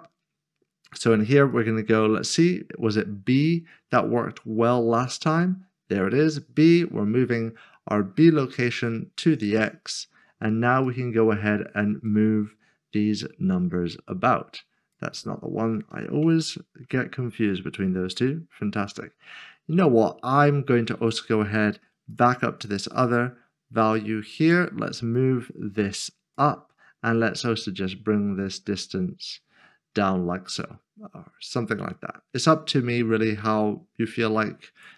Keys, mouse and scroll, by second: 0.1-0.7 scroll down 1, 1.7 click, 2.7-3.3 scroll down 1, 5.0-5.7 scroll down 1, 5.7 click, 10.9 click, 16.3 Return, 16.9 click, 22.1 click.